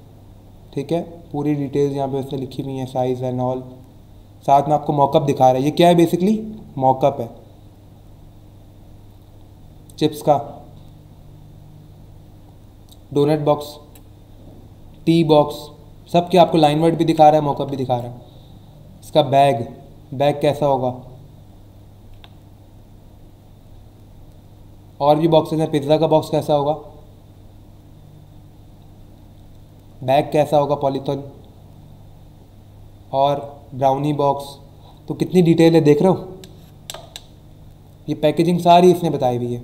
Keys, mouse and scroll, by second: 2.3-3.0 scroll down 2, 7.2-8.6 scroll down 4, 10.4-11.0 scroll down 2, 13.5-13.9 scroll down 2, 15.5 scroll down 1, 17.4-18.4 scroll down 3, 22.7 scroll down 1, 23.3 scroll down 1, 23.9 scroll down 1, 24.4 scroll up 1, 26.7-27.2 scroll down 2, 27.7 scroll down 1, 31.6-32.2 scroll down 2, 32.7 scroll up 1, 33.9-34.5 scroll down 2, 36.7 scroll down 1, 37.7 scroll up 1, 38.2-38.7 scroll down 2, 39.5 scroll up 1.